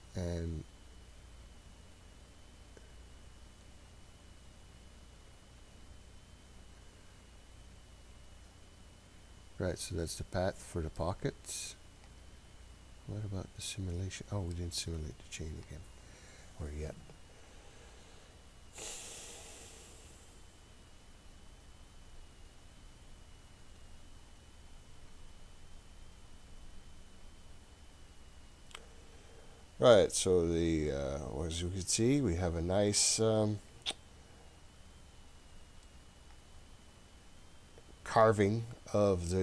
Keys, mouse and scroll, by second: 2.0 click, 6.5 click, 9.1-10.0 scroll up 4, 10.0-10.6 scroll down 2, 11.0-14.6 middle drag, 15.6-27.9 drag, 29.8-30.5 scroll down 5, 30.9-32.9 middle drag, 30.9-32.6 scroll down 1, 33.1-33.6 scroll up 2, 33.6-34.0 scroll down 2, 34.0-34.6 scroll up 1, 35.1-35.8 scroll down 1, 35.8-39.4 middle drag.